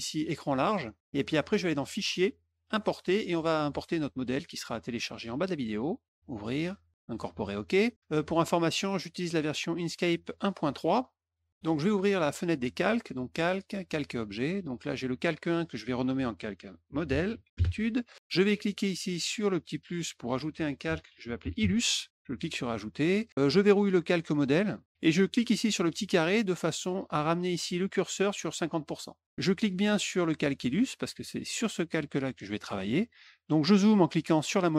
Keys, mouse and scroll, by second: 3.0 click, 5.6 click, 6.9 click, 8.2 click, 9.0 click, 11.2 click, 11.6 middle click, 13.1 click, 13.7 click, 14.7 click, 15.5 click, 15.6 click, 16.6-17.9 typing, 19.5 click, 20.6-22.0 typing, 22.9 click, 23.5 click, 25.6 click, 27.1-29.2 drag, 29.6 click, 32.7 middle click, 34.4 middle click.